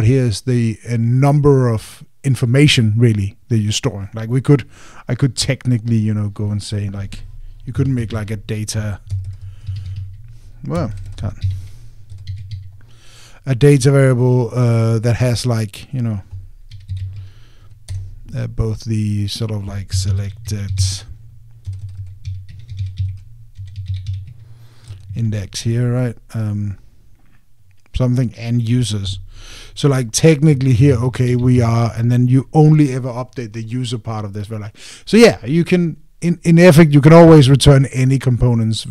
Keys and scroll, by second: 8.7 alt+a, 10.6 alt+t, 18.7 Return.